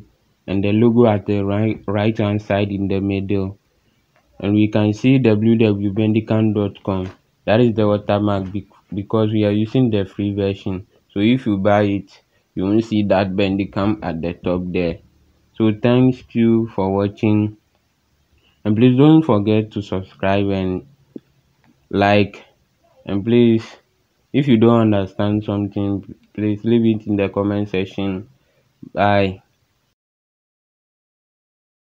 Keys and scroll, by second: 0.0-2.8 typing, 9.2 space, 9.8 space.